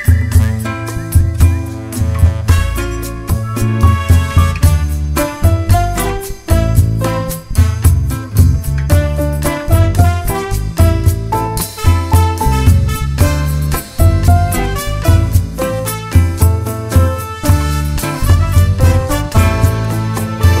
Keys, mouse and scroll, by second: 0.1 scroll up 2, 0.3 Tab, 1.1 scroll up 2, 1.5 1, 1.8 click, 2.0 shift+click, 2.3 g, 4.1 shift+click, 4.5 g, 5.3 click, 5.9 g, 7.5 Tab, 8.1 scroll down 1, 8.3 `, 8.5 Tab, 8.6-9.3 scroll up 1, 9.3 click, 9.6 g, 10.4 ctrl+r, 11.1 click, 11.3 Tab, 11.3 scroll down 1, 11.5 `, 12.3 scroll up 1, 12.4 `, 13.7 alt+a, 14.1 `, 15.6 scroll down 1, 15.8 scroll up 1, 16.0 `, 16.5-17.0 scroll up 1, 17.0 3, 17.1 click, 17.5 shift+click, 18.3 s, 19.6 `.